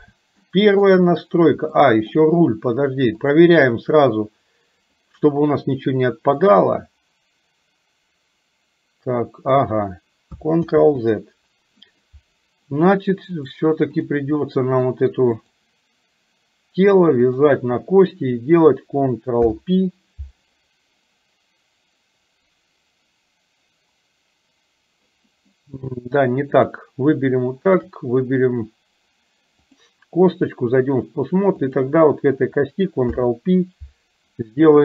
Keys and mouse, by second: 0.4 shift+middle click, 1.9 shift+middle click, 3.3 click, 5.0 click, 6.4 click, 6.8-9.6 drag, 10.8 ctrl+z, 13.5 click, 14.4 middle click, 15.6 click, 17.4 shift+click, 19.4 ctrl+p, 26.6 click, 27.8 shift+click, 29.8-30.9 drag, 31.6 click, 33.1 ctrl+p.